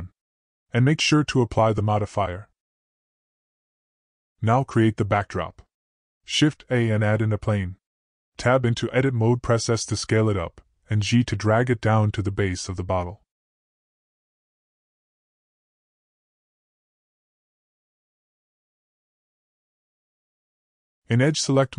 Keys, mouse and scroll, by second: 0.7 click, 3.2-3.7 drag, 4.2 middle click, 5.2 middle click, 6.8 shift+a, 8.9 Tab, 10.1 s, 12.8 click, 13.8 g, 17.0 middle click, 17.9 middle click, 18.5 click, 19.6 click, 21.1 e.